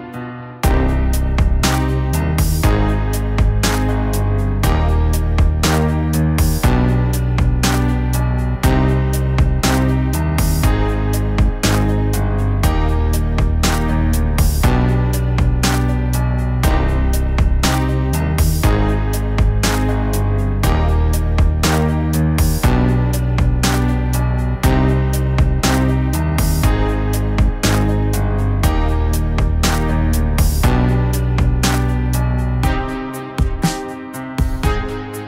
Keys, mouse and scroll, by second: 12.8 middle click, 13.1 middle click, 14.2 middle click, 21.8 middle click, 22.8 middle click, 23.4 middle click, 23.8 middle click, 25.6 middle click, 26.9 middle click, 27.5 middle click, 31.2 middle click, 32.6 middle click, 33.8 middle click, 34.2 middle click, 35.0 middle click.